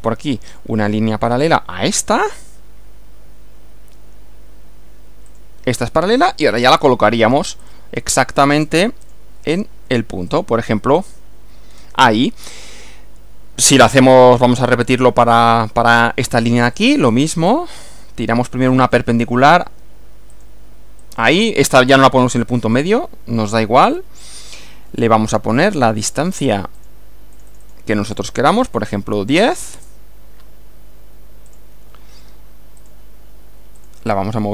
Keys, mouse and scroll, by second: 0.4 click, 5.3 click, 6.2 click, 7.6 click, 9.0 click, 10.3 click, 11.0 click, 11.7 scroll down 1, 16.8 click, 18.9 click, 20.4 click, 21.0 click, 22.2 scroll up 1, 23.9 click, 25.8 click, 26.8 click, 27.4 click, 28.4-29.3 typing, 29.8 Return, 31.5 click, 32.8 click, 33.8 click.